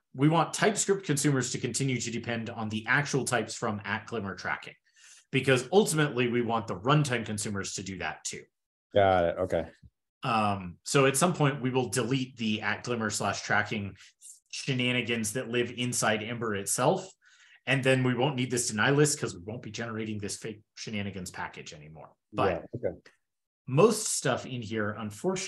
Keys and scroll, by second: 23.3 super+w.